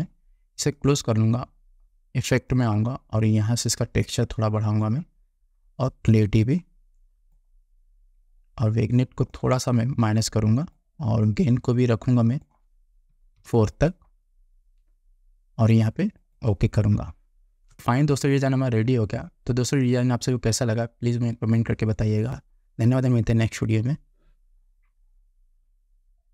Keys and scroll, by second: 13.5 4.